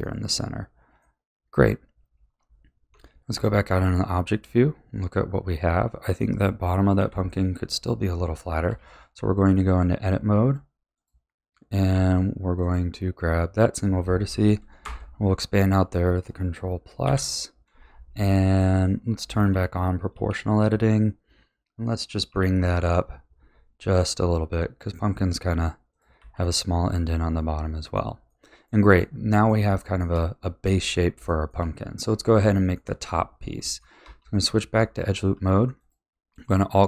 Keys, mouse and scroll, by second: 0.0-1.3 middle drag, 1.3-2.2 scroll down 3, 2.2 b, 2.9 Tab, 3.3-3.8 scroll down 4, 3.8-6.8 middle drag, 6.9 KP_1, 8.6 Tab, 9.5 middle click, 10.2-10.9 scroll up 3, 10.9 click, 11.9 1, 12.6 click, 14.8 ctrl+KP_Add, 17.0 KP_1, 18.2-20.1 shift+middle drag, 20.1 o, 22.3 g, 26.1 a, 26.4-32.0 middle drag, 32.0-32.5 scroll up 2, 32.5 shift+middle click, 33.1-33.6 scroll down 2, 33.6 middle click, 34.0 2, 34.5-35.7 middle drag, 35.7 alt+click.